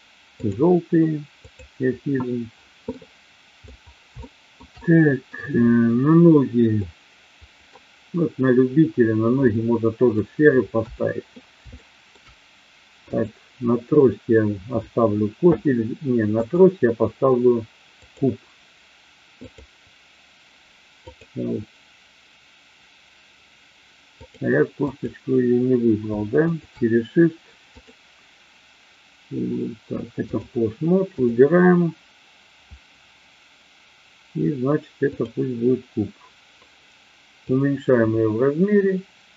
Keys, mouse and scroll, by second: 1.3 click, 2.8-3.6 middle drag, 4.2-4.6 shift+middle drag, 4.7 middle click, 6.8-7.7 middle drag, 9.3-10.1 middle drag, 10.7 KP_1, 11.7-12.2 shift+middle drag, 13.1 click, 16.3-18.2 drag, 19.5 click, 21.1 click, 24.3 click, 26.3 shift+click, 27.8-30.5 drag, 31.1 click, 35.1 click, 37.5-39.3 drag.